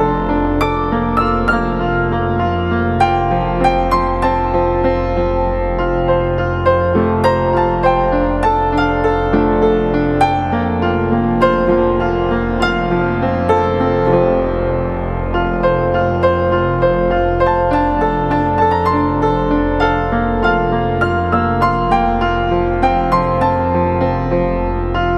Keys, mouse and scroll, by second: 1.9 alt+shift+click, 5.3 Left, 6.4 Right, 6.6 Right, 7.2 Return, 17.5 space, 19.3 double click, 23.3 ctrl+=, 23.8 ctrl+=, 24.2 space.